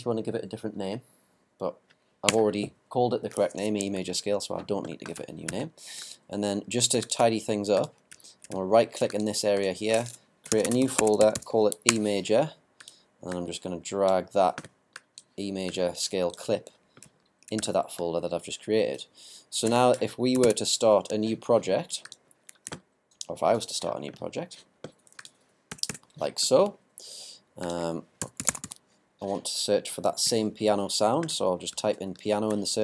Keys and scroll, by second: 10.3-11.5 typing, 20.4 ctrl+super+n.